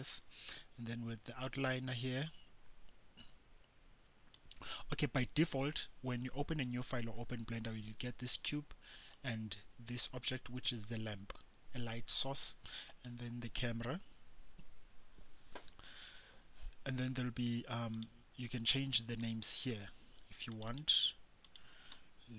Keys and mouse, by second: 1.6-9.3 drag, 9.3-16.9 right drag, 18.2-22.3 drag.